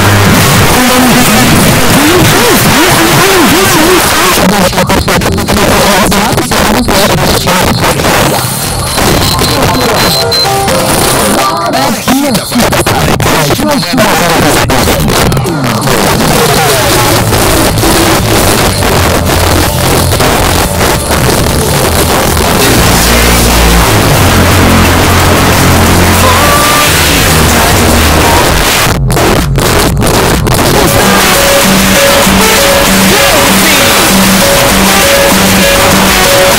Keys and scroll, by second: 4.0 Page_Down, 28.4 Page_Down, 36.5 space.